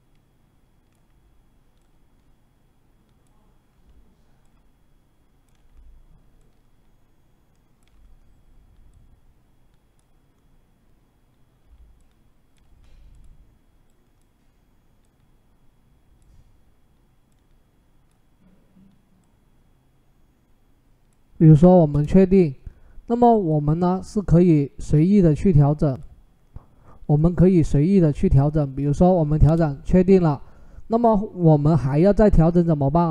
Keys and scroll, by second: 21.7 Return, 29.3 Return.